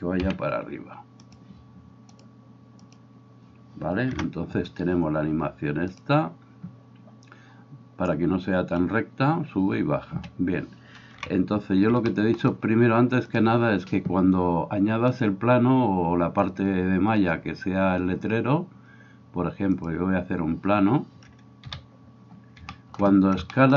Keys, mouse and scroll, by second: 2.3-13.4 drag, 4.2 KP_0, 10.2 Escape, 11.1 KP_1, 13.4-15.2 middle drag, 15.2-23.7 drag, 21.6 KP_7.